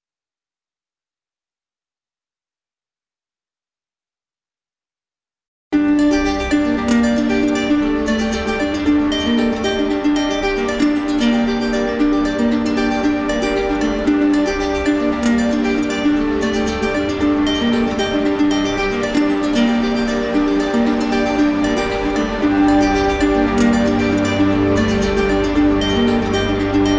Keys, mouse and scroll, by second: 1.9 click, 2.7 ctrl+click, 4.2 ctrl+click, 4.6 ctrl+click, 9.1 click, 9.5 ctrl+click, 10.3 click, 11.0 d, 11.8 d, 12.0 d, 12.7 d, 14.2 click, 14.7 typing, 15.4 click, 16.0 shift+click, 16.9 click, 18.9-20.0 drag, 20.7 middle click, 22.5 middle click, 23.0 middle click, 23.5 middle click, 24.0 middle click, 24.6 middle click.